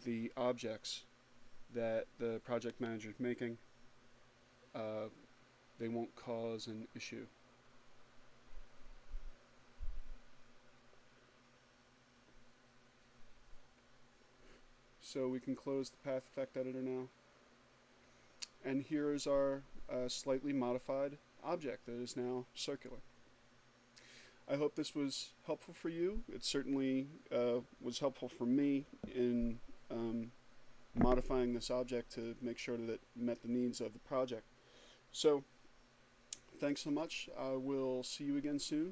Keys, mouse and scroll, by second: 13.4 click, 38.3 click.